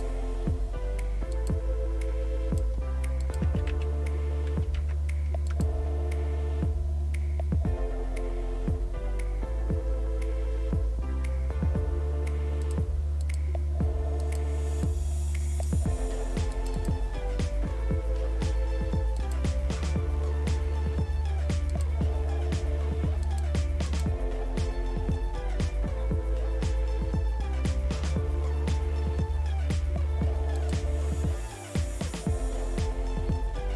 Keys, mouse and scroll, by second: 1.3 click, 3.4 typing, 4.8 typing, 5.5 click, 5.8 Return, 12.6 click, 14.2 click, 19.2 click, 21.7 click, 23.3 click, 30.6 click.